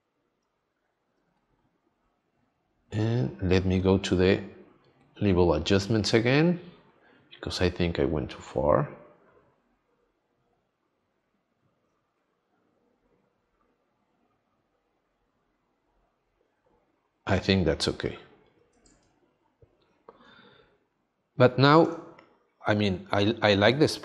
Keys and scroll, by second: 19.0 space, 21.9 space.